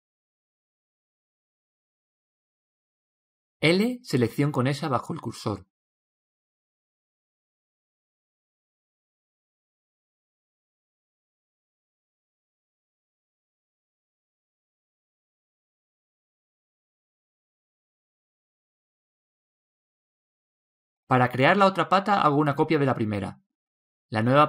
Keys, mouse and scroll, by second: 0.1 Tab, 1.3 KP_3, 3.8 l, 5.2 click, 8.9-10.7 middle drag, 11.2 KP_3, 13.6 s, 17.2 KP_1, 19.2-22.0 middle drag, 22.6 shift+d.